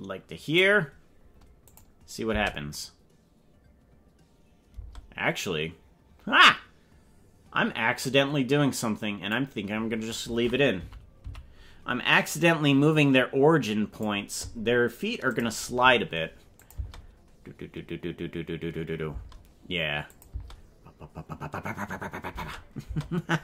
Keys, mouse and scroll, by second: 1.8 click, 2.3 space, 4.9 space, 8.1-9.4 drag, 11.0 Right, 11.5 Left, 12.4-14.2 drag, 15.3 click, 16.8 click, 16.8 space, 19.2 space, 20.2-22.9 drag, 20.3 space, 22.5 space, 22.9 space.